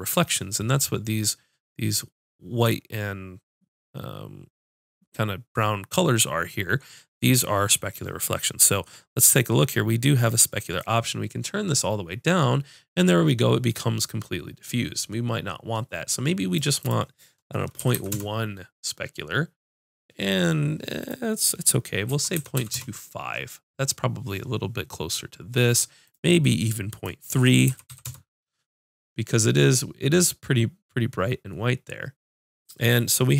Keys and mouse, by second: 14.5-16.1 middle drag, 16.8-18.3 drag, 18.3-21.0 right drag, 21.0-25.4 drag, 23.1-25.4 right drag, 26.1-33.3 drag.